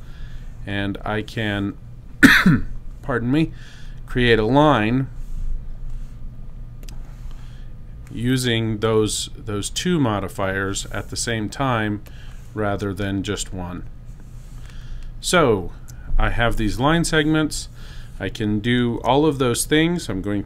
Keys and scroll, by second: 20.1 super+a.